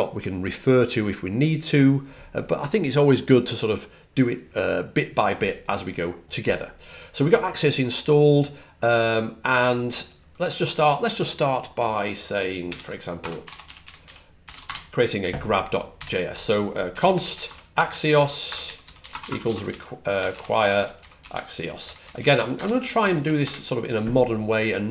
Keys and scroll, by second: 12.3-23.0 typing.